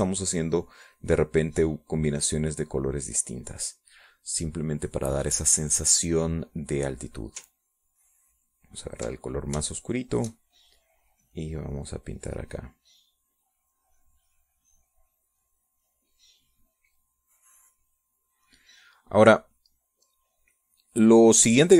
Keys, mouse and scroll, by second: 4.6-6.1 middle drag, 7.0 click, 9.2 ctrl+click, 10.5 shift+click, 11.5-19.2 shift+drag, 19.6 middle click, 20.1 middle click, 21.2-21.7 drag.